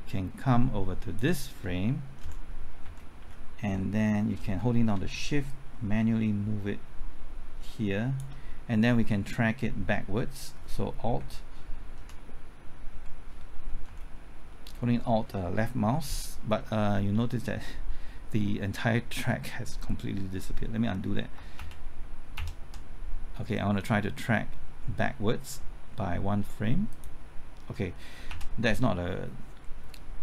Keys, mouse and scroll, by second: 2.2 Right, 2.8 Right, 3.2 Left, 5.5-8.2 shift+drag, 11.2 typing, 11.9 alt+Left, 13.8 Right, 21.3 typing, 21.5 ctrl+z, 22.3 ctrl+z, 26.9 click, 28.1 typing, 28.3 ctrl+z.